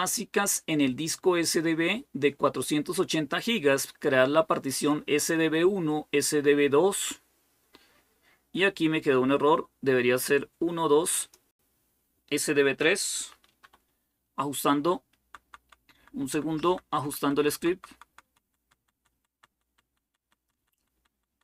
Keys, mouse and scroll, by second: 12.9 Delete, 13.4 3, 15.0 Down, 15.2 Down, 15.4 Down, 15.6 Down, 15.7 Down, 15.9 Down, 16.0 Down, 16.2 Down, 16.5 Down, 16.6 Down, 16.8 Down, 17.0 Down, 17.1 Down, 17.3 Down, 17.5 Down, 17.7 Down, 17.8 Down, 18.0 Down, 18.2 Down, 18.5 Down, 18.5 Down, 18.7 Down, 18.9 Down, 19.1 Down, 19.3 Down, 19.4 Down, 19.6 Down, 19.8 Down, 20.0 Down, 20.2 Down, 20.3 Down, 20.5 Down, 20.7 Down, 20.9 Down, 21.1 Down, 21.2 Down.